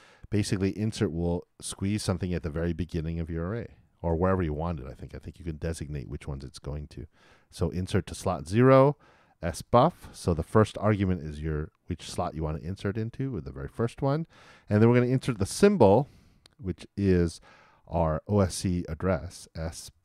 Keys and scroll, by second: 4.0 shift+9, 15.5 shift+'.